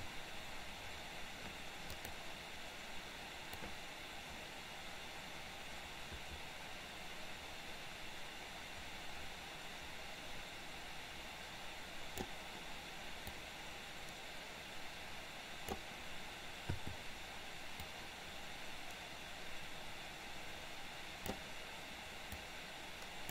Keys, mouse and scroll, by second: 2.0 click, 3.7-12.5 drag, 13.6-16.0 drag, 18.0-21.5 drag, 22.6 click.